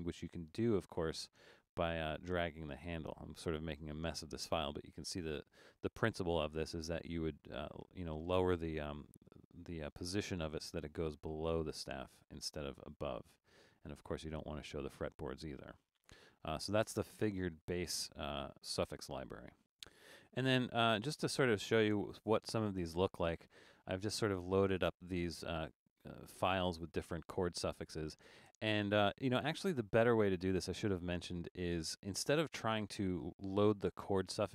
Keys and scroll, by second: 11.6 super+z, 12.3 super+z, 13.2 super+z, 14.4 super+z.